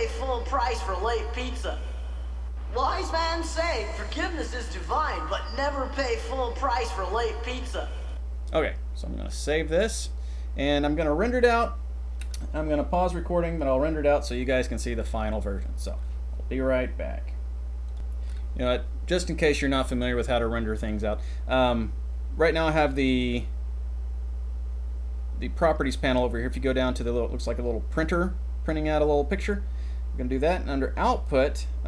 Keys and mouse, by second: 8.1 click, 9.8 click, 25.5 click.